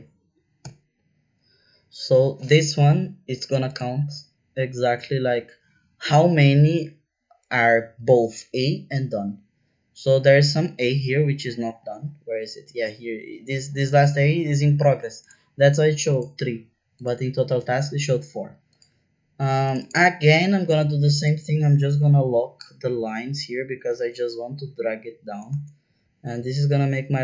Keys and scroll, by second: 0.6 Return, 24.1 shift+4, 24.6 Right, 24.8 Right, 25.1 Right, 25.5 shift+4.